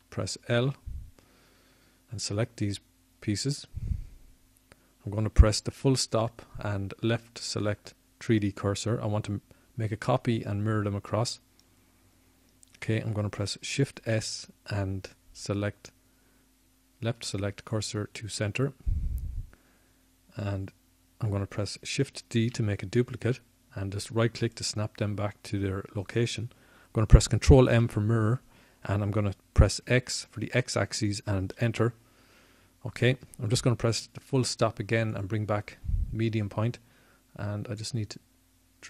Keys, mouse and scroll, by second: 4.5 l, 5.2 l, 5.9 l, 10.8 ., 19.2 shift+s, 27.6 shift+d, 30.7 click, 32.8 ctrl+m, 38.6 ..